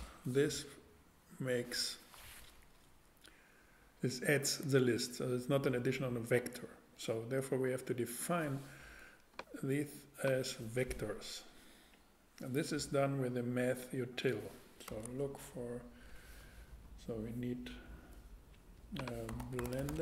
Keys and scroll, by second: 0.5 Return, 15.0 super+Tab, 19.3-20.0 typing.